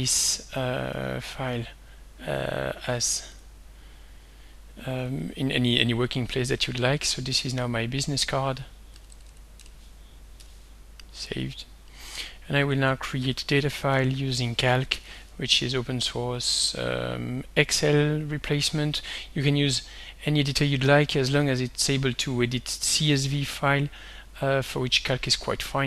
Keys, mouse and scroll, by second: 0.1 click, 1.4 click, 3.2 click, 5.0 click, 6.2 click, 7.6 click, 8.9 Delete, 10.4 ., 11.5 click, 14.5-15.5 typing, 16.4 click, 20.9 click, 24.9 click.